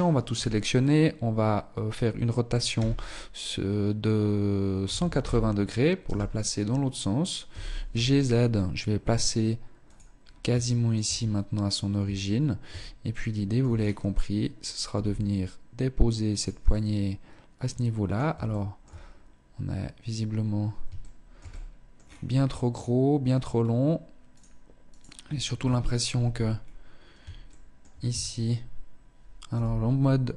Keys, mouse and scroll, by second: 1.9 r, 6.6 g, 9.4-9.9 scroll up 3, 9.9 shift+middle click, 10.2 scroll up 2, 11.2 Tab, 12.2 shift+middle click, 12.8-14.0 scroll down 3, 14.0 scroll down 2, 14.0 g, 15.8 middle click, 17.6 shift+middle click, 18.2-18.7 scroll up 2, 18.7 scroll up 1, 20.1 shift+middle click, 20.6 middle click, 21.1 scroll down 4, 22.7 scroll up 1, 23.5 right click, 24.1 right click, 24.8 KP_1, 25.4 Tab, 25.8 scroll up 1, 26.6 shift+middle click, 27.2 a, 28.6 z, 29.5 b.